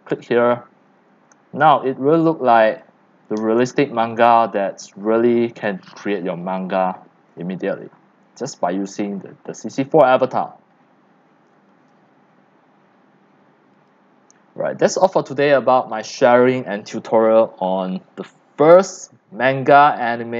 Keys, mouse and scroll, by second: 1.0-1.5 scroll, 1.2 right click, 1.8-5.3 typing, 3.0 click, 4.8 click, 4.9 scroll down 1, 6.5 click, 6.7 x, 7.4 click, 7.9-8.2 scroll, 8.3 right click, 8.7 scroll, 8.8 right click, 9.1-9.9 c, 9.3 click, 10.2 middle click, 13.8 click, 14.7-18.0 drag.